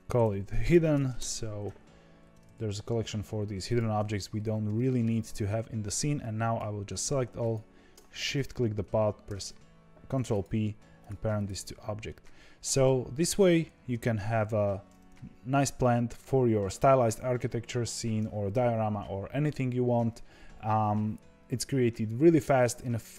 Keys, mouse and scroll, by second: 1.1 Return, 2.5 e, 3.6 click, 4.7-6.1 shift+middle drag, 6.1 click, 7.3 shift+click, 9.2 ctrl+p, 10.9 click, 11.3 click, 11.6-12.0 scroll down 5, 12.0-13.0 middle drag, 13.0 e, 13.9 g, 15.1-15.9 scroll up 3, 15.9-16.2 scroll down 2.